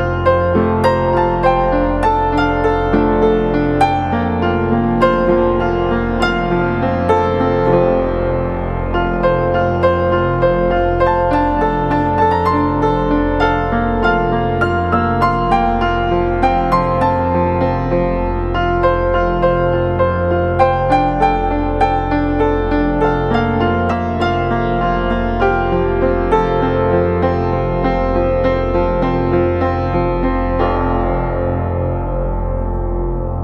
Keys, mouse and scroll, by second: 24.2 alt+click.